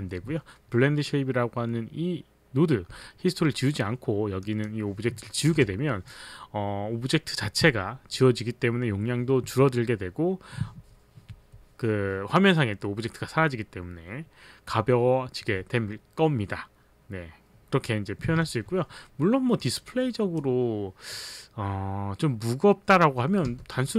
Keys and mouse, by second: 4.4 click, 5.6 Insert, 5.6 Delete, 18.3 z, 19.6 click, 19.9 click, 23.4 h.